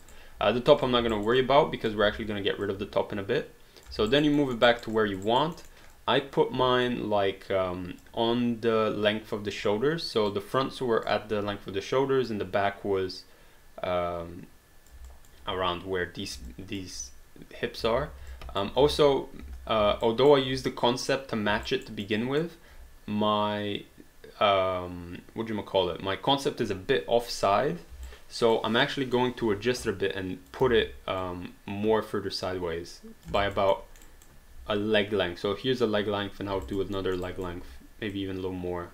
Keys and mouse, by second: 0.0 alt+right click, 0.8 click, 1.1 alt+right click, 1.4 alt+click, 2.0 w, 2.7 click, 4.1 alt+right click, 4.6 alt+middle click, 4.7 alt+right click, 5.0 alt+click, 5.3 alt+right click, 5.6 alt+middle click, 6.0 alt+click, 6.9 click, 10.3 click, 12.3 click, 15.1 alt+click, 16.8 alt+click, 17.9 ctrl+z, 18.3 alt+click, 18.8 space, 20.0 alt+right click, 21.6 alt+right click, 22.1 alt+middle click, 28.1 alt+right click, 29.2 alt+middle click, 29.8 click, 30.7 ctrl+z, 31.2 click, 33.4 alt+right click, 34.0 alt+middle click, 34.1 alt+right click, 36.6 alt+right click, 37.0 alt+middle click, 37.5 alt+right click, 38.1 click.